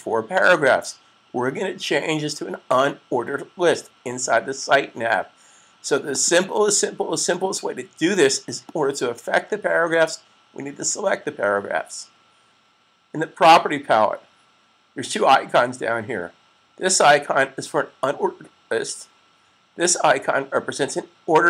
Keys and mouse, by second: 6.0 click.